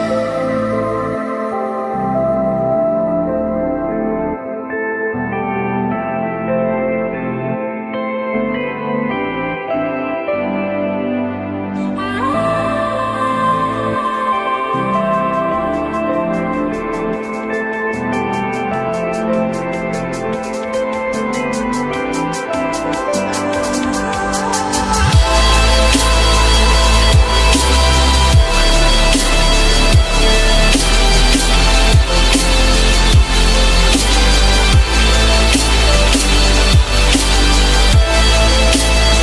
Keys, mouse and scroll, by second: 1.8 F3, 2.6 alt+middle click, 4.4 ü, 10.0 F3, 12.2 alt+middle click, 13.3 alt+middle click, 13.4 alt+scroll up 1, 13.7 F3, 17.2 F3, 19.9 typing, 21.8-22.5 typing, 22.7 Return, 24.5-24.9 typing, 33.5 F3, 34.3 alt+middle click, 37.2 alt+middle click, 37.9 alt+middle click.